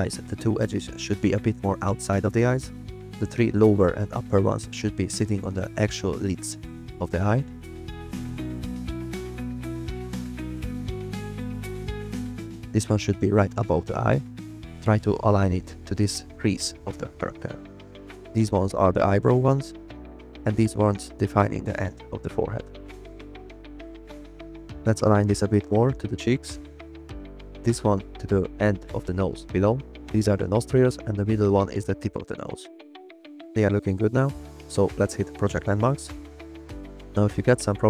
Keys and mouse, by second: 0.0 a, 1.0 click, 2.2 g, 4.7 click, 5.8 g, 6.3 click, 6.7 click, 6.8 g, 7.2 click, 7.6 click, 7.8-11.0 typing, 8.9 click, 9.3 click, 9.9 click, 10.9 click, 11.3 click, 12.5 s, 12.6 z, 13.2 click, 13.3 g, 14.4 click, 14.7 click, 14.9 g, 15.2 click, 15.7 g, 16.1 click, 16.6 g, 16.9 click, 19.3-22.4 typing, 19.6 click, 20.3 click, 21.0 click, 22.0 click, 22.3 click, 23.3 click, 25.4 click, 25.6 g, 26.2 click, 27.6 click, 28.0 g, 28.8 click, 29.7 click, 29.9 g, 30.5 click, 33.1 g, 34.1 g, 34.7 click.